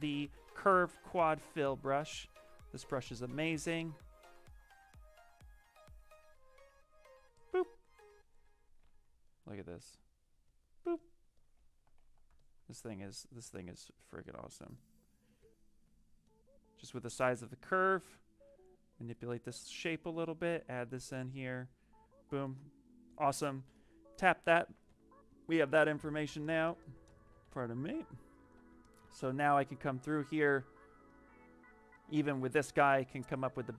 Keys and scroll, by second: 1.1 s, 8.5-9.2 typing, 13.3 x, 15.3 s, 24.3-25.6 typing, 27.3 w.